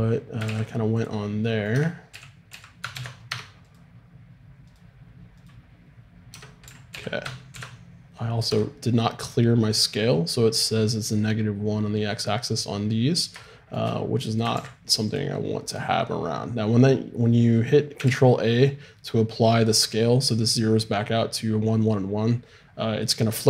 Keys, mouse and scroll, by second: 0.4 ctrl+a, 1.7 Tab, 2.1 a, 2.5 a, 2.9 ctrl+n, 3.3 Tab, 6.4 Tab, 6.7 a, 6.9 a, 7.5 ctrl+n, 8.5 Tab, 13.0-14.5 middle drag, 14.5 ctrl+a, 18.1 ctrl+a.